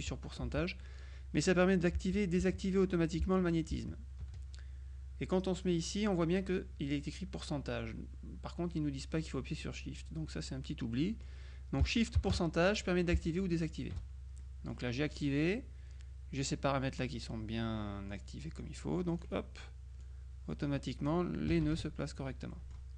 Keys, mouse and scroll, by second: 11.0 click, 14.5 shift+click, 18.2-19.8 drag, 20.1 click, 21.6 KP_Subtract, 22.6 middle click.